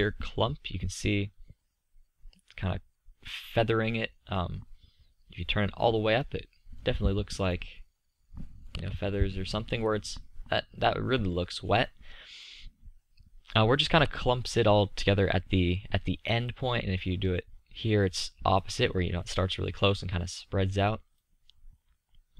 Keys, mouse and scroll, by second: 0.4-2.5 middle drag, 6.4-7.9 middle drag, 11.1-16.6 middle drag, 18.5-22.3 middle drag.